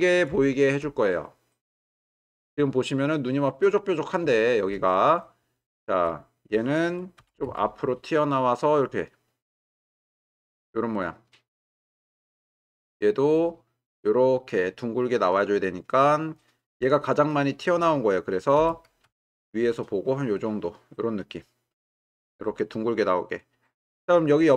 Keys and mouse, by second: 1.3-1.8 middle drag, 2.2-2.5 ctrl+middle drag, 2.8-4.2 middle drag, 4.6 shift+middle click, 5.2-6.0 ctrl+middle drag, 7.2 g, 7.5 y, 10.9-12.9 middle drag, 15.5 middle click, 18.6 g, 19.0 y.